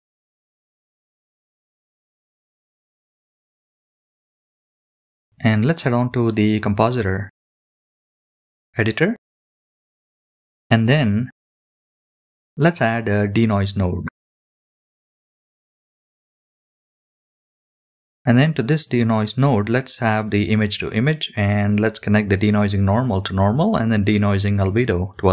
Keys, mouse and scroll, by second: 2.3-3.4 drag, 4.3-5.8 drag, 7.2 click, 8.0 drag, 8.7 click, 9.4 middle click, 10.2 scroll up 2, 11.1 n, 13.5 shift+a, 19.5-20.4 drag, 20.9-21.7 drag, 22.4-23.4 drag, 24.0 middle click, 25.1 click.